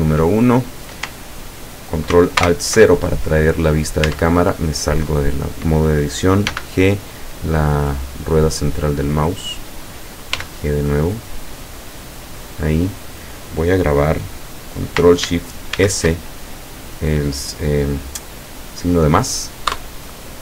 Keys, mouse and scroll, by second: 2.4 ctrl+alt+KP_0, 4.2 Tab, 5.1 right click, 6.5 g, 7.0 middle click, 9.6 click, 10.4 g, 11.7 click, 15.8 ctrl+shift+s, 19.8 KP_Add.